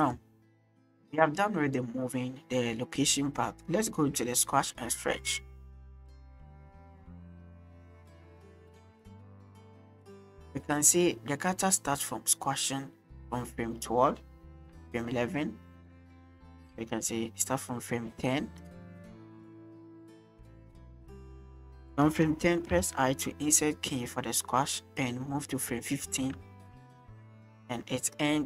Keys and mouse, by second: 5.8 shift+middle click, 7.2 click, 8.3 click, 9.4-18.6 drag, 19.1 shift+middle drag, 19.8 shift+click, 22.7 i, 25.0-26.2 drag, 27.4 click.